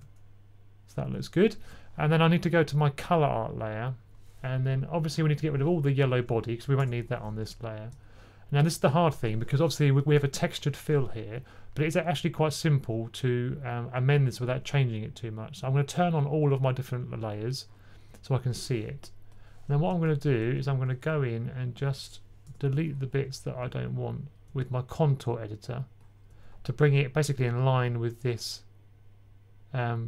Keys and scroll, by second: 20.0-20.4 typing, 22.4-23.1 typing, 24.4 typing.